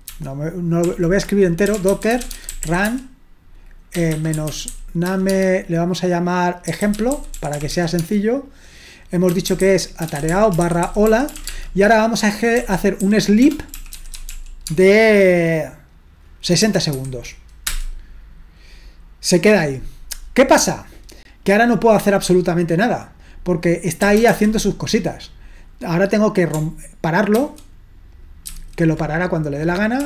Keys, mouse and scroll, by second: 0.1 ctrl+c, 0.9 ctrl+l, 1.4-5.3 typing, 6.6-8.2 typing, 9.3-14.8 typing, 16.6-17.7 typing, 23.9-24.8 typing, 27.4 ctrl+c, 28.5 ctrl+c, 29.8-30.0 typing.